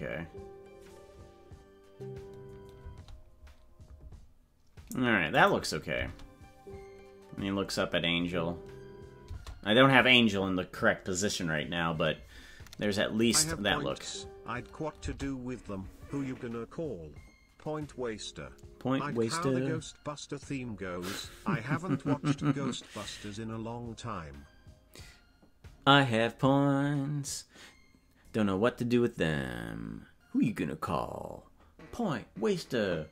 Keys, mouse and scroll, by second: 5.4 click, 5.9 space, 13.3-33.1 drag, 13.4 space, 15.2 space.